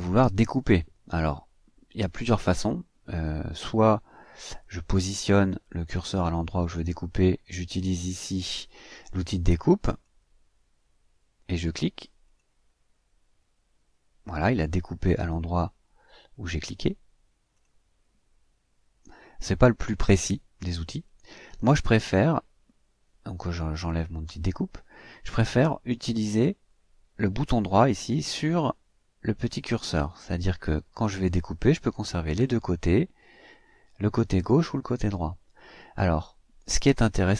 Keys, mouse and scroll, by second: 5.9 click, 9.8 click, 12.2 click, 16.4 click, 17.5 click, 23.8 click, 25.8 click, 29.9 right click.